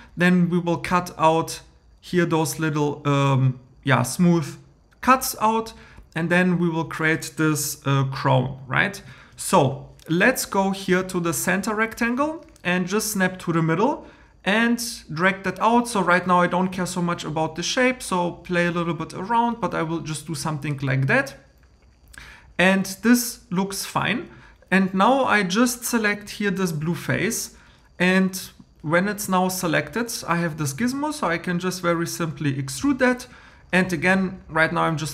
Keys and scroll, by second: 8.9 super+m.